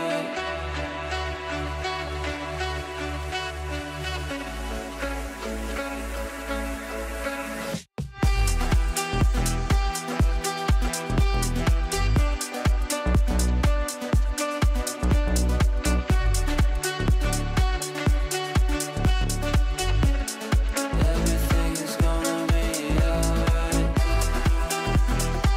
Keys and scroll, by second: 0.2 Delete, 14.1 shift+F2, 14.3 F3.